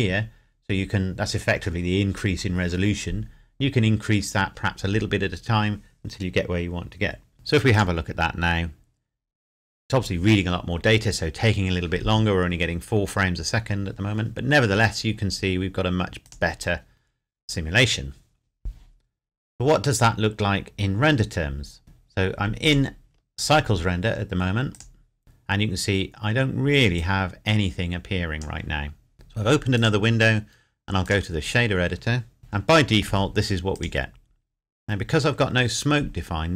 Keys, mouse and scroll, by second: 7.7 click, 16.2 click, 22.6 click, 23.1-23.6 scroll up 1, 24.7 click, 26.9 click, 29.7 click, 32.4 shift+middle click, 33.8 click.